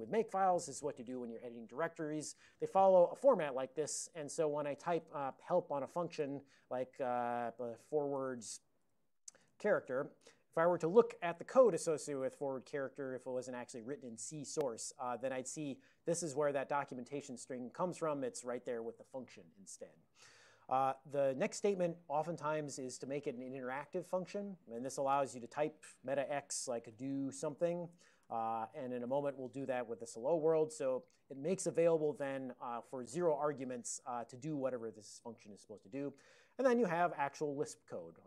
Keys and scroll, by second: 3.5 Down, 3.5 Up, 3.9 Down, 5.6 ctrl+h, 6.3 f, 7.9-10.1 typing, 10.3 Return, 25.9 alt+x, 26.8-29.8 typing.